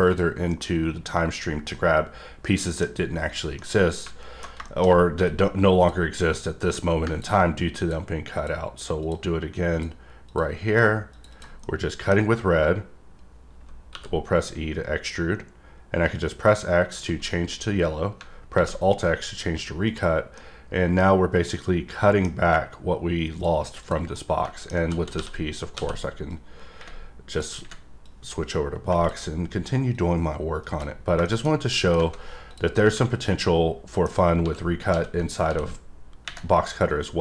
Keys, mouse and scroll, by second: 0.0 click, 0.4 scroll down 1, 0.8-3.0 middle drag, 3.3 click, 3.9-4.5 middle drag, 4.8-5.8 scroll up 2, 5.8 click, 6.3 click, 7.8 click, 8.3 click, 9.0 click, 9.7 click, 10.3 click, 11.1 click, 11.4 double click, 11.9 middle click, 19.8 click, 20.3-22.2 middle drag, 23.3 click, 23.8 click, 24.1 middle click, 26.3 click, 28.0 click, 29.9 click, 31.2 middle click, 31.4 scroll down 3, 31.7 middle click, 32.5 click, 32.8-34.1 middle drag, 34.1 scroll up 3, 36.9 click.